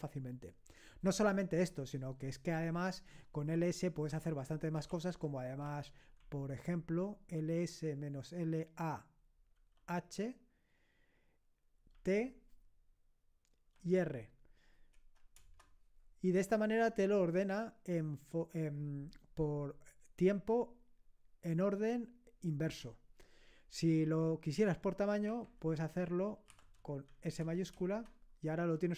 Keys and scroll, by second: 3.5-6.1 typing, 9.6 typing, 11.9 typing, 13.7 r, 15.4 Return, 25.3 Up, 25.6 Left, 25.8 Left, 26.5 Delete, 27.1 s, 27.7 Return.